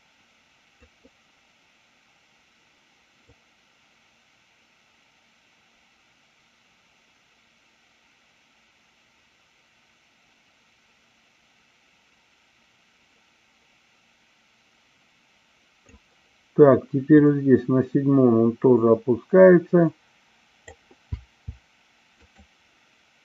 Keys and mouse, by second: 3.1-15.8 drag, 17.2-20.7 drag.